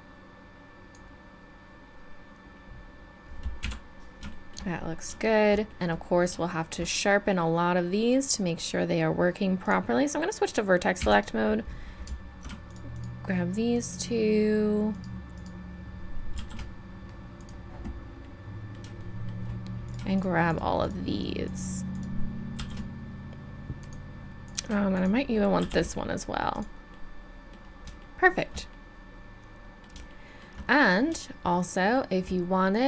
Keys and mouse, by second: 3.6 KP_1, 9.6-17.4 drag, 11.0 a, 16.3 shift+e, 18.2 click, 19.8-22.6 right drag, 22.6 shift+e, 25.6 shift+e, 29.8 middle click.